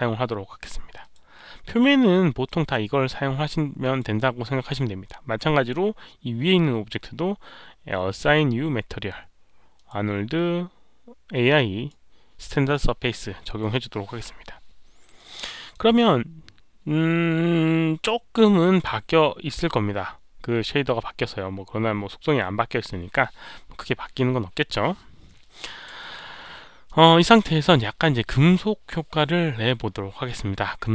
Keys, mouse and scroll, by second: 0.9 click, 2.4 drag, 3.8 click, 4.8-8.3 right drag, 5.7 click, 8.3 click, 9.7 click, 9.7 right click, 11.3 click, 15.1-15.6 drag, 15.6 right click, 19.3 click, 25.0-25.3 scroll up 1, 25.9-26.4 alt+middle drag, 26.8 alt+middle click.